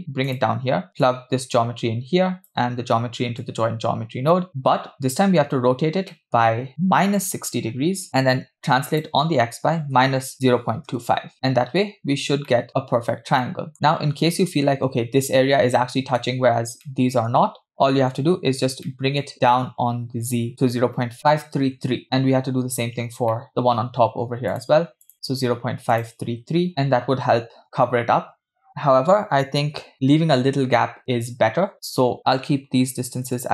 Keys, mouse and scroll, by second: 1.1-2.5 drag, 3.4-4.5 drag, 6.1 middle click, 6.5-7.2 scroll up 4, 7.2 click, 8.9-11.1 drag, 11.5-12.3 scroll up 2, 12.6 shift+middle click, 13.0-13.4 scroll up 2, 13.5-13.8 shift+middle drag, 13.7 scroll up 1, 14.4 scroll up 1, 15.9-16.8 scroll down 4, 16.8-17.3 shift+middle drag, 17.8-18.1 shift+middle drag, 18.6 scroll up 1, 19.0 shift+middle click, 21.1 shift+click, 21.2 BackSpace, 21.8-23.3 scroll down 3, 22.0 shift+middle click, 23.4 middle click, 24.6-26.7 drag, 26.7 3, 27.6 shift+middle drag, 27.6 scroll up 4, 28.7-29.2 scroll down 2, 29.9-30.6 scroll down 2, 30.6-31.7 scroll down 1, 31.8-33.5 drag, 32.5 BackSpace.